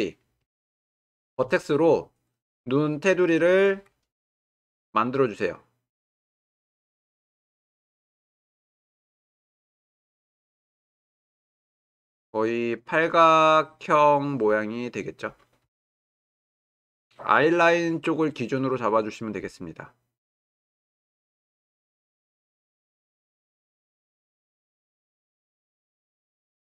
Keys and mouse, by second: 1.4 1, 4.1 g, 7.9 g, 9.1-10.0 drag, 10.0 g, 11.8 g, 15.6 g, 20.5 g, 22.0-23.1 drag, 23.1 g, 26.6-26.7 drag.